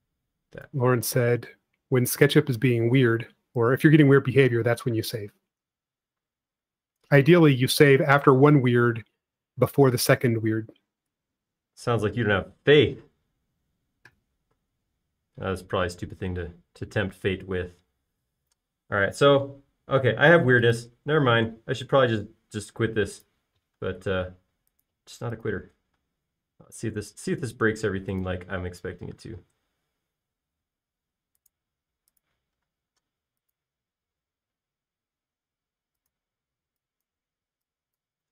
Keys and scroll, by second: 17.9-18.8 typing, 25.1 l, 26.9 typing, 30.2 typing, 33.9 l, 37.4 e.